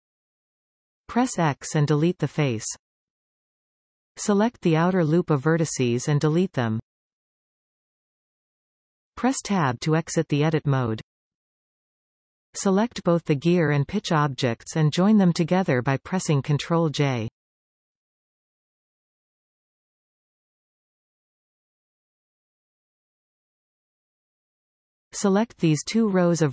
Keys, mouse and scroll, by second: 1.8 x, 5.5 alt+shift+click, 7.0 x, 10.1 Tab, 13.1 shift+click, 17.1 ctrl+j, 23.6 Tab, 25.5 alt+a, 26.2 alt+shift+click.